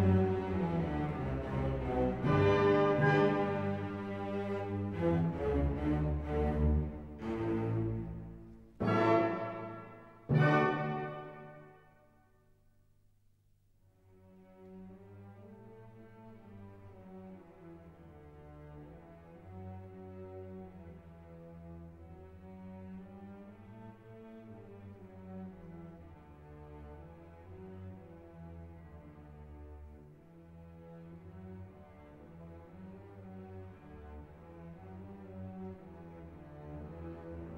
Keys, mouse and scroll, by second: 6.4 scroll up 1, 7.8 click, 8.9 middle click, 9.6-11.3 drag, 11.3-13.4 drag, 13.4 middle click, 14.8 click, 20.4-26.3 drag, 26.3-34.6 drag, 36.5 click.